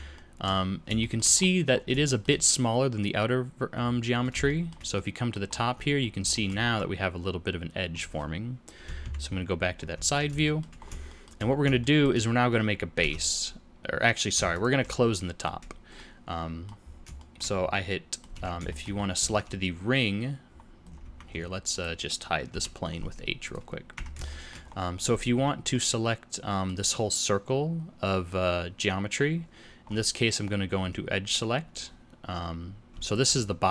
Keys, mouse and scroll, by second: 0.1 shift+middle click, 0.9 shift+middle click, 1.3-2.0 scroll up 8, 2.0 shift+middle click, 3.7-4.4 scroll down 9, 4.4 shift+middle click, 4.9 middle click, 5.4-6.0 scroll up 3, 5.7 z, 6.3 shift+middle click, 6.6-7.9 scroll up 1, 7.9-8.5 scroll up 1, 9.0 ctrl+KP_3, 9.7-10.2 scroll down 6, 9.9 z, 10.4 shift+middle click, 10.7 scroll up 2, 11.0 shift+middle click, 11.4-11.7 scroll up 2, 11.7 shift+middle click, 12.9 alt+a, 14.7 alt+click, 15.9 middle click, 16.8-17.1 scroll down 4, 17.1 shift+middle click, 17.6 middle click, 18.3 alt+a, 18.6 shift+middle click, 18.9-19.3 scroll up 2, 19.1 z, 20.5-21.6 scroll down 8, 21.0 Tab, 21.7 click, 22.5 h, 22.8-23.4 scroll up 6, 23.4 click, 23.9 Tab, 24.2-25.7 shift+scroll up 8, 24.5 shift+middle click, 25.3 2, 25.7 middle click, 29.8-30.6 scroll up 2, 30.6-32.8 scroll down 1, 32.8 scroll down 1, 33.0 alt+click, 33.4-33.7 scroll down 4.